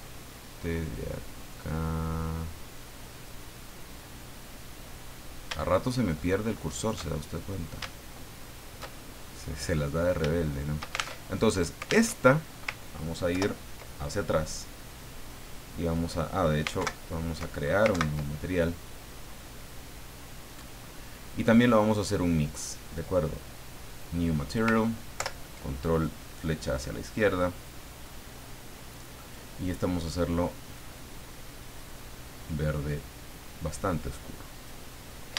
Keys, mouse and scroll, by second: 6.1 alt+shift+right click, 6.6 alt+shift+right click, 7.1-7.6 scroll up 2, 8.4 alt+shift+right click, 8.9-9.7 scroll down 2, 9.8 scroll down 2, 10.4 shift+middle click, 11.5 alt+shift+Tab, 12.0 alt+Tab, 13.3 ctrl+Left, 16.8 alt+Right, 17.9 ctrl+Right, 20.4 click, 23.8 click, 25.1 ctrl+Left, 27.1 click, 27.9-28.9 middle drag, 29.2 click, 30.7 click, 31.7-34.8 drag.